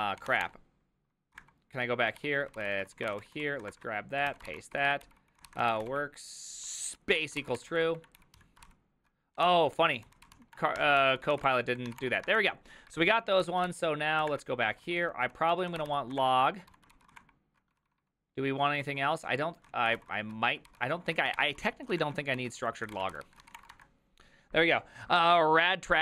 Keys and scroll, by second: 0.0-0.8 typing, 1.4 ctrl+^, 2.2-11.9 typing, 4.5 ctrl+c, 8.6 ctrl+c, 11.0 ctrl+c, 12.0 Return, 12.3 alt++, 13.0 alt+{, 13.4-16.7 typing, 13.6 ctrl+c, 14.3 ctrl+^, 16.9 ctrl+c, 17.2 ctrl+^, 17.6 ctrl+^, 17.7-24.0 typing, 22.0 ctrl+^.